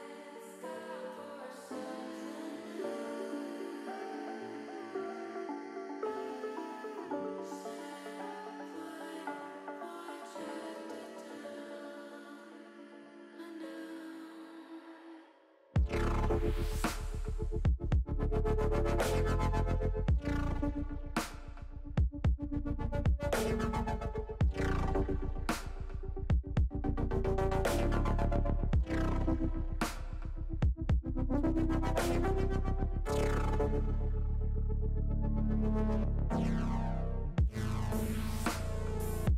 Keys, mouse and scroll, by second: 2.8 click, 4.2 click, 5.0 ctrl+z, 8.0 shift+middle click, 8.6 shift+middle click, 11.2 shift+middle click, 12.7 shift+middle click, 14.0 ctrl+r, 15.7 click, 17.4 click, 20.0 click, 20.6 click, 23.7 e, 25.1 s, 26.6 click, 26.9 ctrl+z, 28.3 s, 28.7 e, 29.1 x, 30.3 click, 30.6 ctrl+z, 31.3 e, 32.6 click, 33.4 s, 33.8 x, 36.1 click, 36.6 middle click, 37.7 middle click, 38.5 ctrl+z.